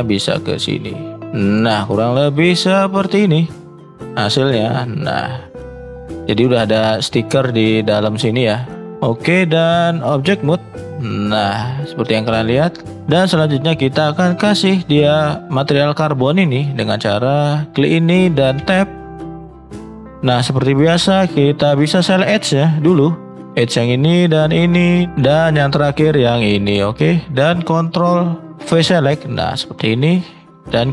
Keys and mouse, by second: 2.4-6.4 middle drag, 13.5-14.4 middle drag, 14.6-16.2 middle drag, 17.2-23.3 middle drag.